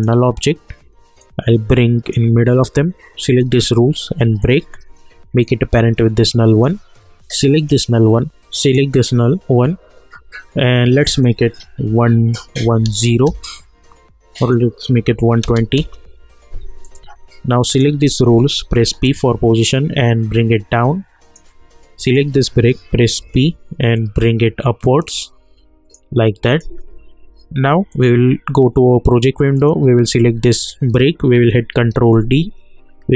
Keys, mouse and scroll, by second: 4.4 shift+click, 5.7-7.5 drag, 8.6 click, 11.1 click, 13.2 Return, 14.4 click, 15.8 Return, 16.8 click, 18.8 p, 19.7-22.0 drag, 23.2 p, 23.9-26.5 drag, 31.7 ctrl+d.